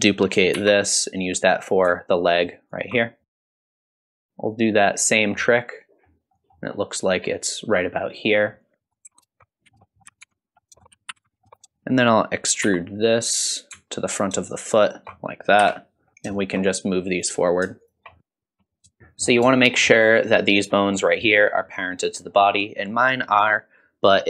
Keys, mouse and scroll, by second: 0.6 shift+d, 3.5 shift+middle click, 3.5 scroll up 2, 3.6 shift+middle click, 3.6 click, 3.7 ctrl+click, 4.1 click, 4.2 scroll down 2, 4.2 shift+middle click, 4.5 click, 5.0-5.4 scroll up 2, 5.4 middle click, 6.3 middle click, 8.8 click, 9.0 ctrl+click, 9.5 click, 9.6 KP_1, 9.8 middle click, 10.0 KP_1, 10.2 ctrl+click, 10.5 scroll down 2, 10.7 shift+middle click, 10.8 scroll up 1, 10.8 shift+middle click, 10.9 e, 11.3 middle click, 11.4 shift+middle click, 12.6 e, 15.6 KP_1, 16.1 scroll down 2, 16.3 shift+middle click, 17.1 click, 17.8 shift+click, 18.2 ctrl+shift+KP_3, 18.2 ctrl+shift+click, 19.0 middle click, 19.0 scroll down 1, 19.0 shift+z, 19.6 shift+middle click, 19.9-22.4 scroll up 2, 22.4 middle click.